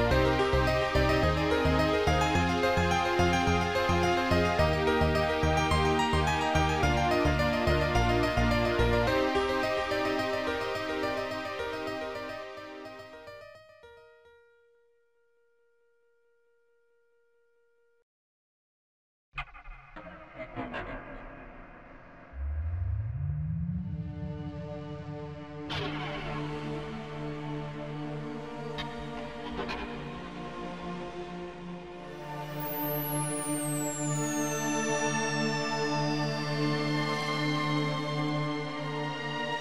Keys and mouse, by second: 3.1 shift+click, 4.0 shift+click, 4.6 shift+click, 5.1 shift+click, 6.7 shift+click, 7.8 shift+click, 12.8 shift+click, 15.0 shift+click, 17.9 shift+click, 21.6 shift+click, 23.2 shift+click, 24.2 shift+click, 26.3 Delete, 26.3 shift+click, 27.5 ctrl+z, 28.8 ctrl+z, 28.8 Delete, 30.1 ctrl+z, 30.1 Delete, 30.1 click, 33.1 ctrl+z, 33.1 click, 34.1 click.